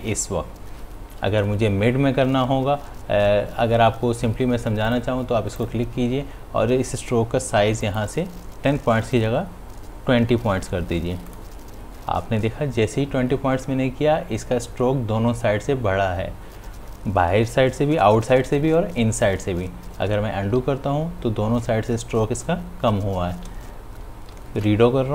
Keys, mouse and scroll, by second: 4.9 click, 9.3 click, 12.2 click, 21.9 ctrl+z.